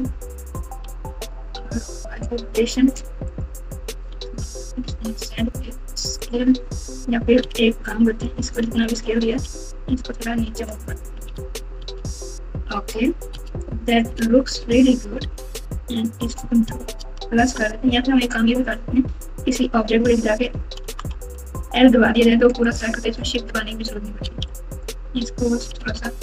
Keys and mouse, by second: 0.5 r, 4.0 s, 7.4 alt+z, 7.8 click, 8.0 click, 8.6 alt+z, 9.3 g, 11.2 alt+z, 11.8 alt+z, 13.6 click, 14.1 alt+z, 16.8-17.5 ctrl+KP_Add, 19.9 space, 20.8 space, 21.5 l, 22.6 click, 24.2 alt+z, 24.4 click, 24.6 click.